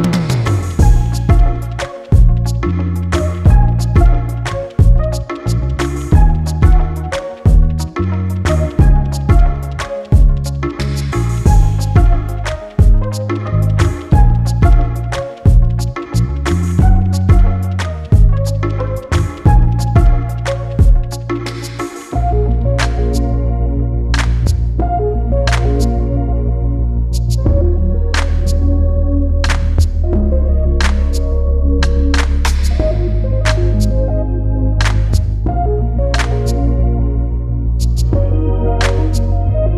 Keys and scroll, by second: 31.2 e, 32.6-33.5 typing.